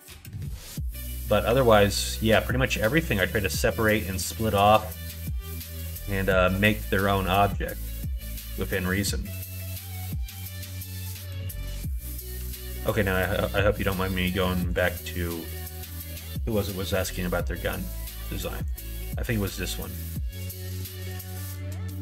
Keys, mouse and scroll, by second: 0.9 middle click, 1.4 Tab, 1.9 middle click, 2.7 click, 3.0 middle click, 4.9 middle click, 5.7 middle click, 6.3 middle click, 7.2 middle click, 7.7 middle click, 8.2 middle click, 8.5 middle click.